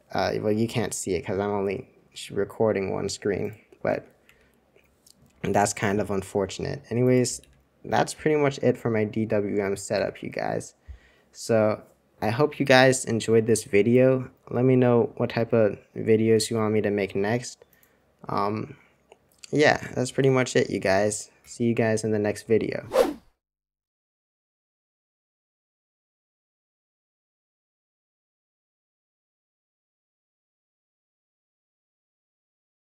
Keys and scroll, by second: 1.0 super+2, 4.0 super+1, 4.2 super+2, 7.4 typing, 9.9 super+1.